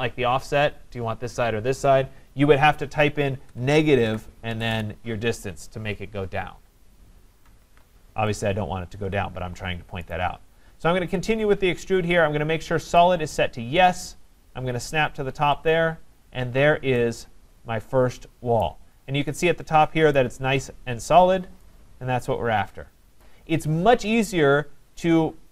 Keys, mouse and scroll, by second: 3.5-4.7 typing, 7.7 ctrl+z, 8.4 click, 10.1 right click, 13.0 click, 15.7 click, 16.5 scroll, 18.6 right click, 19.0 scroll, 20.2 right click, 20.4-21.0 scroll, 21.0-21.3 scroll, 23.2-23.7 scroll, 23.2 right click, 25.1 scroll down 7.